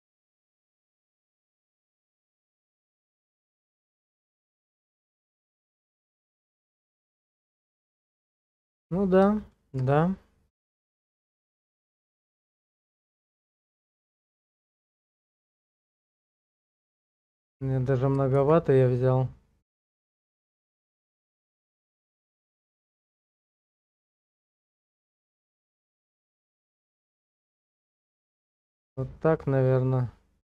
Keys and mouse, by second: 0.3 shift+middle click, 1.1 Tab, 4.2 middle click, 5.1 shift+click, 6.2-7.5 drag, 8.2 click, 9.5 shift+click, 10.6 KP_0, 13.8-16.3 shift+drag, 18.9 ctrl+z, 22.5-24.7 middle drag, 25.1 middle click, 25.2 click, 25.2 alt+middle click, 26.0 shift+middle click, 26.1 shift+click, 26.2 shift+middle click, 27.8-30.2 drag.